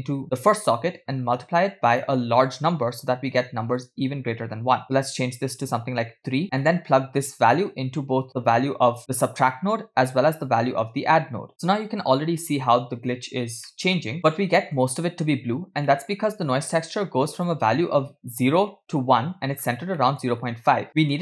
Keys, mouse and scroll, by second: 1.3-1.6 scroll up 2, 1.9-6.3 drag, 6.4 middle click, 6.4 scroll down 1, 7.4 drag, 7.5-9.0 drag, 13.8-14.8 middle drag, 15.9 middle click, 16.9-17.5 drag, 19.6-20.3 scroll up 3, 20.0 middle click, 20.9 middle click.